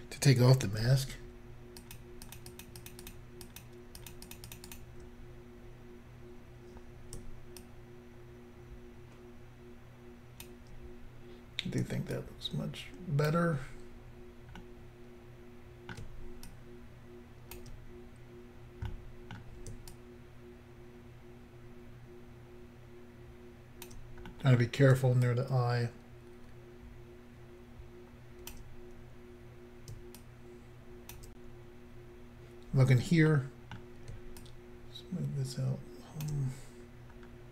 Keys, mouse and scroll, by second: 1.8 shift+click, 2.3 shift+click, 2.6 shift+click, 2.8 shift+click, 2.9 shift+double click, 3.1 shift+click, 3.1 shift+click, 3.5 shift+click, 3.6 shift+double click, 4.1 shift+click, 4.1 shift+click, 4.3 shift+click, 4.4 shift+double click, 4.5 shift+click, 4.6 shift+click, 4.7 shift+click, 4.8 shift+double click, 7.7 shift+click, 12.1 shift+click, 14.6 middle click, 16.5 shift+click, 19.0 middle click, 19.9 shift+click, 24.3 middle click, 25.3 shift+click, 30.2 shift+click, 33.3 middle click, 34.4 shift+click, 36.8-37.5 scroll down 3.